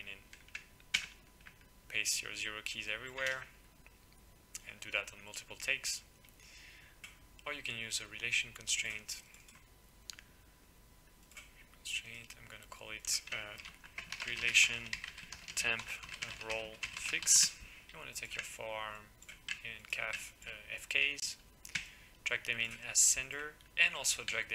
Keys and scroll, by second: 0.9 ctrl+v, 3.3 ctrl+v, 13.6-17.9 typing, 21.7-22.6 typing.